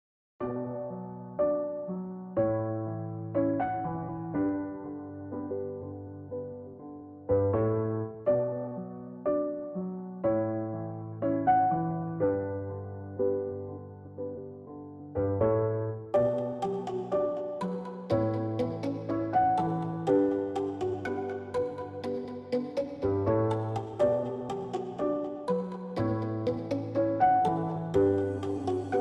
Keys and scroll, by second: 4.2 Return, 15.0-15.5 space, 20.5 space, 23.8 space, 24.2 space, 24.3 space, 27.5 space.